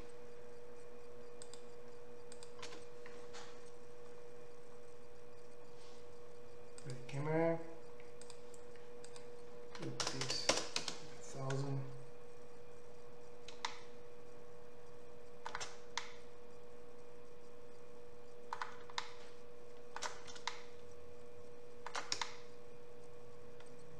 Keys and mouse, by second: 0.0 n, 1.6-2.3 middle drag, 2.3 click, 2.5-6.9 middle drag, 2.7 n, 6.9 click, 7.1-9.1 middle drag, 9.1-23.9 drag, 10.2 KP_0, 11.6-14.8 middle drag.